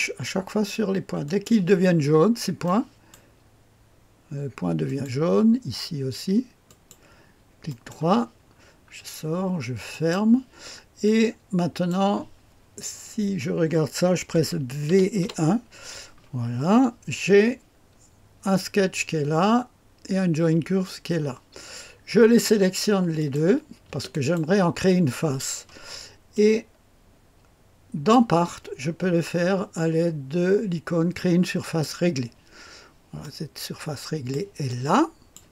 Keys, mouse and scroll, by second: 1.2 click, 2.6 click, 3.2 middle click, 4.8 click, 6.6 click, 7.6 middle click, 7.9 right click, 8.4-9.9 scroll down 1, 9.9-12.5 drag, 14.8 v, 15.2 KP_1, 23.1 click, 26.3-28.1 drag, 31.6 click, 33.2-34.4 drag, 34.6 click.